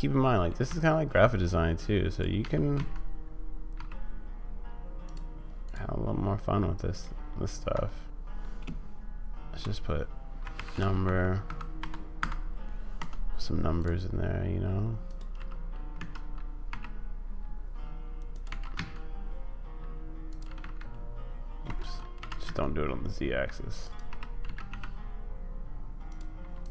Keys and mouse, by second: 0.7 s, 2.4 g, 5.7-7.7 drag, 7.7 Tab, 8.6-12.2 typing, 13.0 Tab, 15.0 click, 15.3 g, 18.5 g, 20.4 g, 22.2 g, 24.0 y, 24.4 g.